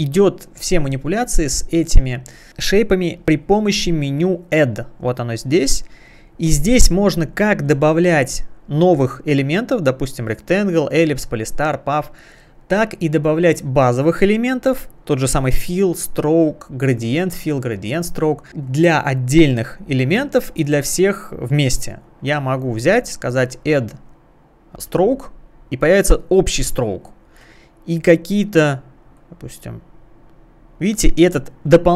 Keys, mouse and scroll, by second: 2.7 space, 3.0 click, 3.2 space, 3.7-4.6 scroll down 1, 3.7 space, 4.6 scroll down 1, 6.1 click, 22.1 click, 23.5 click, 24.9 click, 26.5 click, 29.2 click.